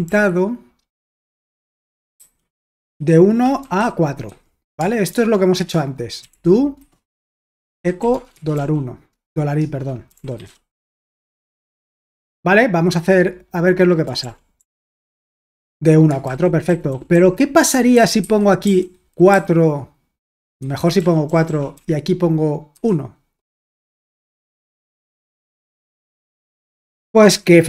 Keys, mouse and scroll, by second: 0.0-0.1 typing, 1.2-8.6 typing, 5.6 Return, 9.6-12.2 typing, 10.8 Escape, 14.2 ctrl+p, 14.6 ctrl+p, 15.1 Return, 16.3 super+l, 16.7-24.7 typing, 24.9 Return, 25.6 super+h, 26.3 ctrl+p, 26.6 Return.